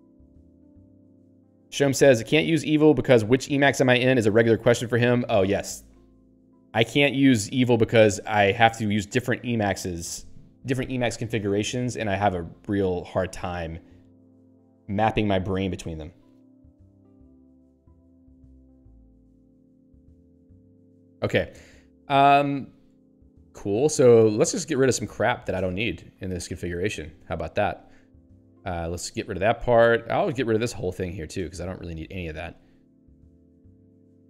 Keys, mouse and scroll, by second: 22.0 click, 22.8 Up, 24.7 Down, 25.7 ctrl+space, 26.3 ctrl+p, 28.9 ctrl+w, 29.3 ctrl+n, 31.1 ctrl+p, 31.5 ctrl+space, 31.7 ctrl+n, 33.9 ctrl+p.